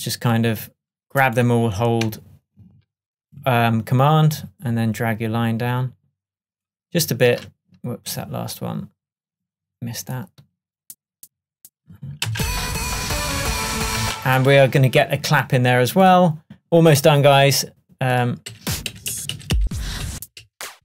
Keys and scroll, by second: 12.4 space, 18.6 Up.